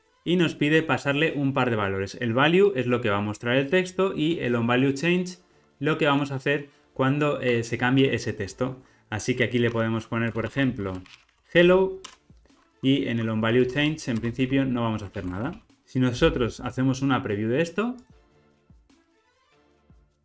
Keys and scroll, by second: 15.2 alt+super+l, 15.5 ctrl+alt+o.